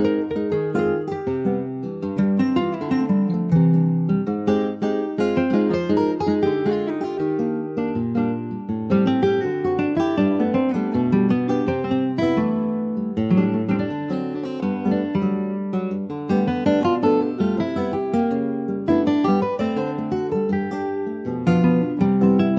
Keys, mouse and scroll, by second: 0.1 shift+middle click, 0.4 shift+scroll up 1, 0.8 click, 1.2-3.5 shift+middle drag, 3.5 click, 4.3 ctrl+z, 4.9 click, 5.4 middle click, 5.9 click, 6.3 shift+click, 7.9 ctrl+s, 8.1 click, 8.7 scroll down 2, 8.9 middle click, 9.7-10.0 ctrl+scroll down 1, 10.0-11.7 middle drag, 11.7 ctrl+s, 11.9 click, 12.1-12.4 scroll down 3, 12.4-13.5 shift+middle drag, 13.5 ctrl+s, 13.5 click, 13.8-15.2 middle drag, 15.2 ctrl+s, 15.4 click, 16.0 alt+middle click, 16.4 alt+middle click, 17.0 alt+z, 17.6 ctrl+s, 19.3 click, 20.3 ctrl+s, 20.5 click, 20.7 shift+a.